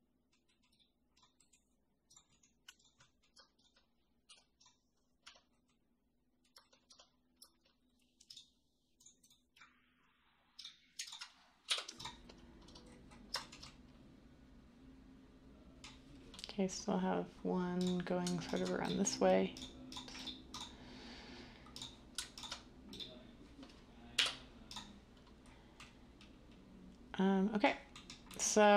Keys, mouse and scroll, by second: 4.2 u, 5.2 Tab, 6.8 Tab, 11.6 u, 24.1 u.